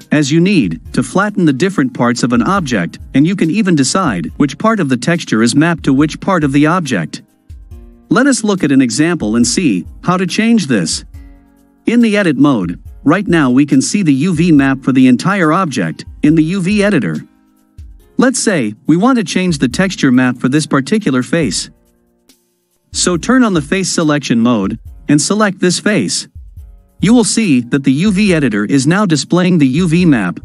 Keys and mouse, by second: 5.5-8.8 middle drag, 8.8 click, 11.0-11.8 drag, 24.2 click, 25.8 click.